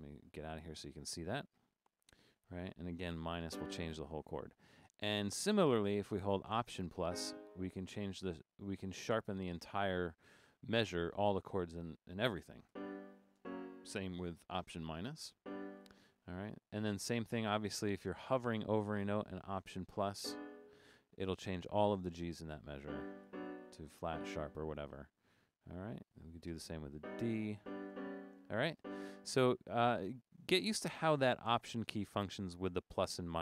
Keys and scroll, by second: 3.5 -, 7.1 alt++, 12.7 alt+-, 13.4 alt+-, 16.6 Up, 16.8 Up, 16.9 Up, 17.4 Up, 20.2 alt++, 22.9 alt+-, 23.3 alt+-, 24.1 alt++, 25.4 Up, 25.7 Up, 25.8 Up, 26.1 Up, 27.0 alt++, 27.6 alt+-, 27.9 alt+-, 28.8 alt++.